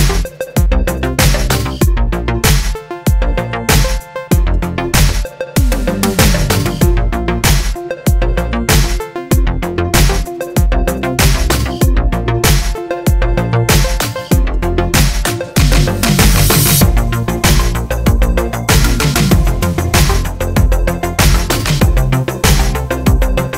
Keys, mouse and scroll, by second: 0.2-1.5 middle drag, 1.5-11.3 drag, 11.3-23.5 middle drag.